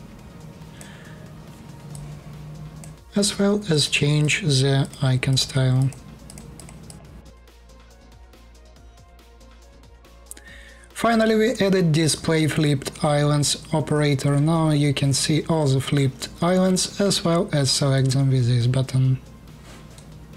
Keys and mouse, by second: 3.5 middle click, 3.9 click, 4.0 middle click, 4.5 click, 4.7 middle click, 5.0 click, 5.5 click, 6.0 click, 6.1 middle click, 6.2 click, 6.3 middle click, 6.5 click, 6.9 click, 7.2 click.